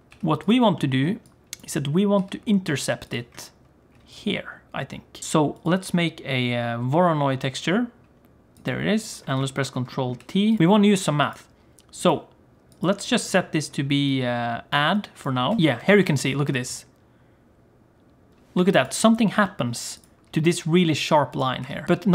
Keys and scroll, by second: 15.5 ctrl+space, 15.6 g, 16.2 g, 21.5 g.